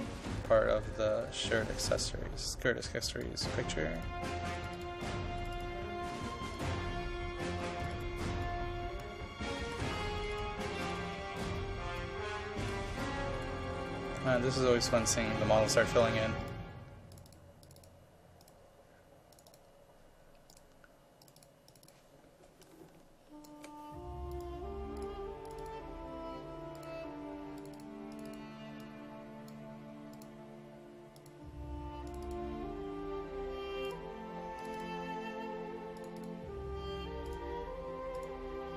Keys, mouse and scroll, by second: 1.8-21.2 drag, 24.3-27.8 drag.